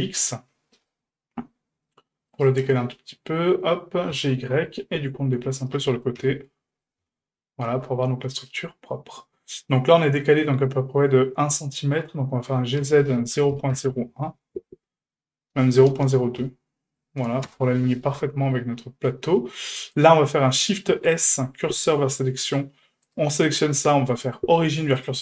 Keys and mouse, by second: 2.7-3.5 middle drag, 4.1 g, 6.2 KP_1, 7.0 KP_3, 8.5-9.2 shift+middle drag, 12.5 g, 18.8 shift+middle drag, 19.9 right click, 20.9 shift+s, 23.1 right click, 24.0 0, 25.0 q.